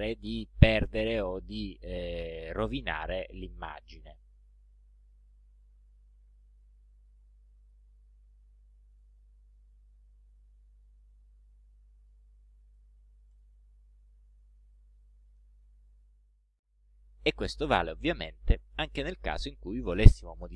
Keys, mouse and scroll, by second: 4.4 click, 5.4 click, 6.7 click, 7.7 click, 9.0 click, 9.8 click, 10.5 click, 11.3 click, 12.1 click, 12.8 click, 13.4 click, 15.0 click, 15.8 ctrl+scroll down 2, 16.3 ctrl+scroll up 2.